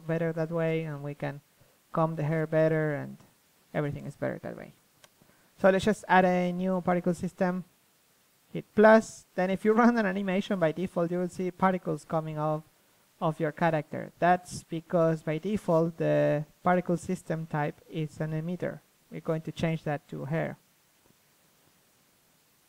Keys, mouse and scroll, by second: 0.3 KP_3, 1.0 a, 1.5 Tab, 1.8 a, 6.1-8.0 drag, 8.4-10.0 drag, 10.3-11.8 drag, 11.8 alt+a, 12.9-14.0 drag, 14.6 Escape, 15.6 KP_1, 18.4-19.9 drag, 20.0-21.0 middle drag, 21.0 KP_3.